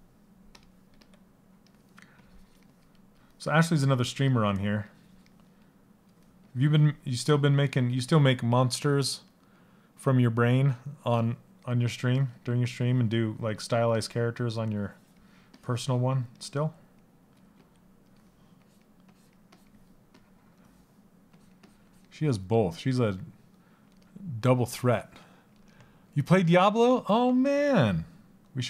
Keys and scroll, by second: 0.6 s, 28.3 s.